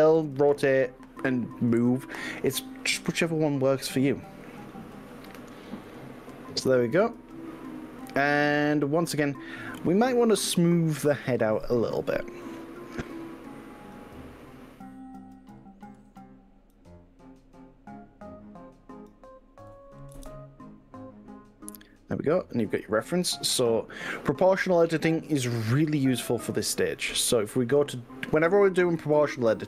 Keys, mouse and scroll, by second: 5.6 click, 5.9-11.8 middle drag, 11.8 click, 13.1-14.0 drag, 16.8 click, 20.2 KP_1, 22.2 click, 26.0 click.